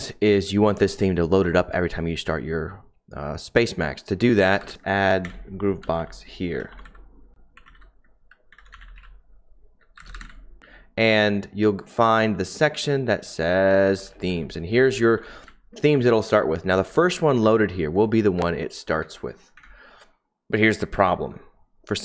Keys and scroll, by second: 4.6-11.1 typing, 13.8-17.8 typing, 18.3 Return, 19.0 Return, 19.5 Up, 20.6 Down, 20.9 Up, 20.9 typing.